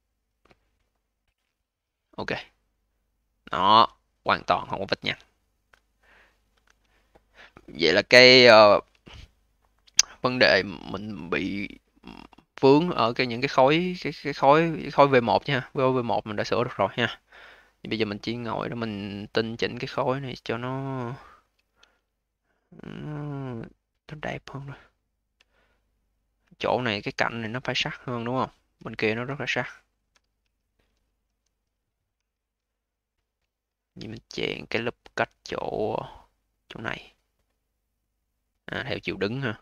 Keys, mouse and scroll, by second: 2.3-5.3 alt+drag, 5.5-6.9 scroll down 10, 6.9-8.5 alt+middle drag, 8.5-8.9 scroll down 4, 8.9-9.4 alt+middle drag, 9.4-11.1 alt+drag, 11.1-12.5 alt+middle drag, 12.5-13.3 scroll up 8, 13.3-14.5 alt+drag, 14.5-15.7 alt+middle drag, 15.7-17.0 scroll up 2, 17.0-17.9 scroll down 1, 17.9 click, 19.8 click, 20.5-21.7 scroll down 4, 21.7 a, 22.5-25.0 right drag, 25.0-25.4 scroll up 1, 25.4-25.9 alt+middle drag, 25.9-26.5 alt+drag, 26.5-26.9 alt+middle drag, 26.9-27.8 alt+drag, 27.8-28.3 scroll down 1, 28.3-30.3 alt+middle drag, 30.3 q, 31.1 v, 32.0 2, 32.5-33.4 scroll up 4, 33.4 alt+middle click, 33.8 a, 39.2-39.6 scroll down 4.